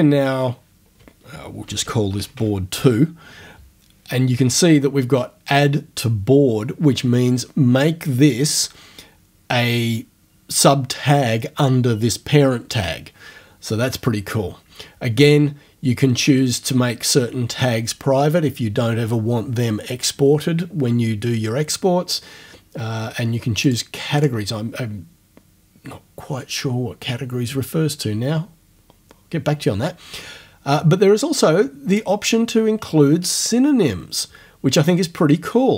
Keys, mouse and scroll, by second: 1.4-3.3 typing, 23.6 click, 24.2 click, 31.9 click.